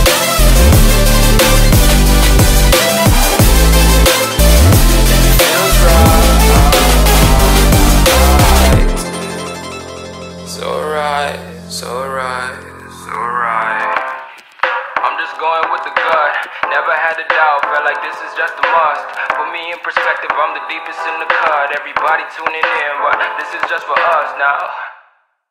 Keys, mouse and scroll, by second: 0.6-4.3 drag, 4.9 click, 5.3 ctrl+v, 6.0-8.4 drag, 8.8 ctrl+v, 9.2-12.0 drag, 12.1 right click, 13.7-16.3 drag, 15.5-17.6 typing, 18.2-21.3 drag, 21.8 c, 22.1 v, 22.9 click, 23.5 shift+click, 24.1 ctrl+c, 24.7 ctrl+v, 25.2 click.